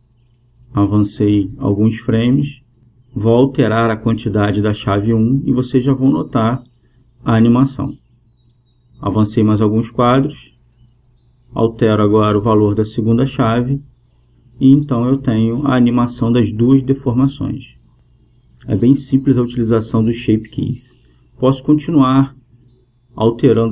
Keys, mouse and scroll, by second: 0.1 i, 2.4-4.1 drag, 4.5-7.3 drag, 10.0-11.8 drag, 15.6-20.4 drag.